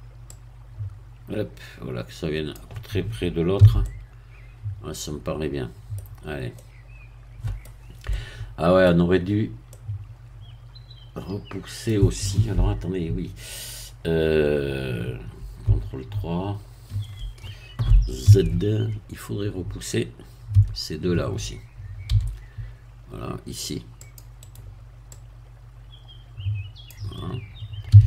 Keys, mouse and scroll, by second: 0.3-2.7 drag, 3.6 z, 3.8 middle click, 6.1-6.5 scroll down 2, 9.2 middle click, 9.3 scroll up 1, 9.7-15.6 middle drag, 16.9 ctrl+3, 18.2 z, 18.9 scroll up 1, 20.5 a, 22.1 c, 24.0 click, 24.5 right click, 25.1-27.9 drag, 27.9 a.